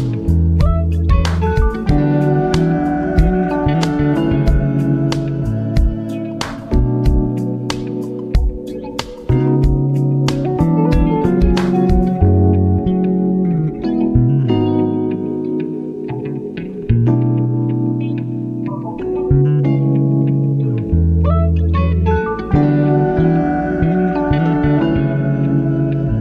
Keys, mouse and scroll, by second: 0.5 ctrl+alt+scroll down 1, 1.3 typing, 1.8 alt+right click, 2.4 ctrl+alt+scroll up 1, 2.6-4.0 alt+right drag, 4.0 ctrl+alt+scroll up 1, 4.2 alt+right click, 4.6-6.7 drag, 6.7 space, 6.8 click, 7.0 space, 7.6-12.2 drag, 12.2 ctrl+alt+scroll down 1, 12.4 space, 12.6 click, 12.6 space, 12.8 ctrl+alt+scroll up 1, 13.1 alt+right click, 13.5 alt+right click, 14.3-18.3 drag, 18.3 ctrl+alt+scroll down 1, 18.9-19.4 ctrl+alt+scroll up 2, 19.1 ctrl+z, 19.9-23.8 drag, 24.0 ctrl+z, 24.7 alt+right click, 24.9 ctrl+alt+scroll up 1, 25.3 click.